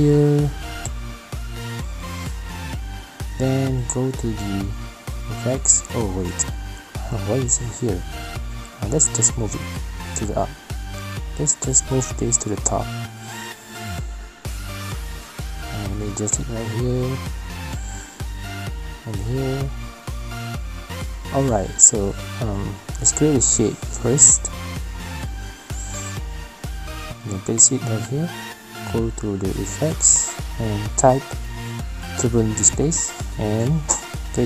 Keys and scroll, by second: 23.1 2, 23.1 BackSpace, 28.3 v.